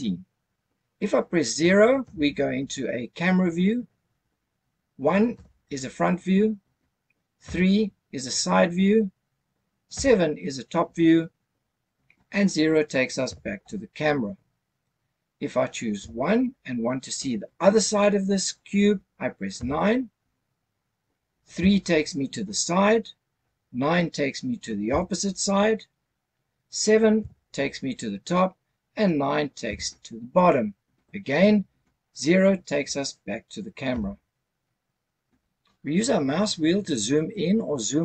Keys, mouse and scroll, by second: 2.0 KP_0, 5.3 KP_1, 7.4 KP_3, 9.9 KP_7, 13.3 KP_0, 16.0 KP_1, 19.6 KP_9, 21.5 KP_3, 24.9 KP_9, 27.2 KP_7, 29.6 KP_9, 33.9 KP_0.